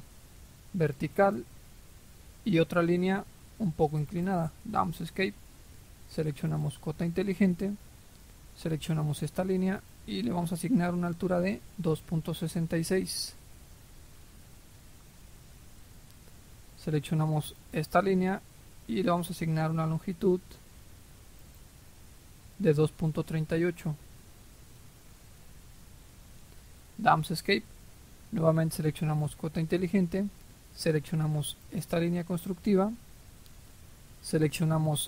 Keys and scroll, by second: 4.7 Escape, 12.3-13.3 typing, 13.4 Return, 23.8-24.9 typing, 25.3 Return, 26.5 Escape.